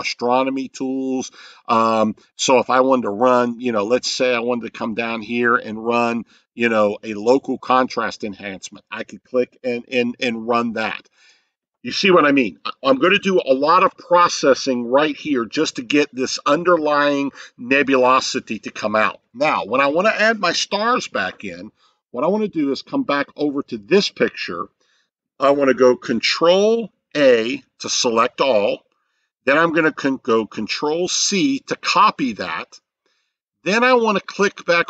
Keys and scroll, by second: 27.2 ctrl+a, 31.1 ctrl+c.